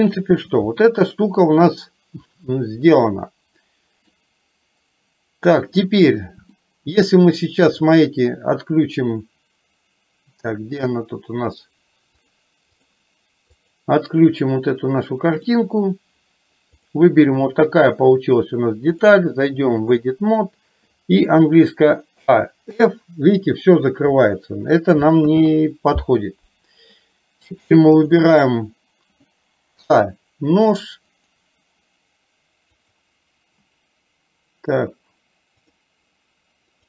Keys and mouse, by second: 0.1 shift+middle click, 1.7-4.2 middle drag, 6.6 shift+middle click, 12.3 click, 13.6 click, 19.1-20.1 drag, 22.8 f, 25.3 ctrl+z, 28.0 click.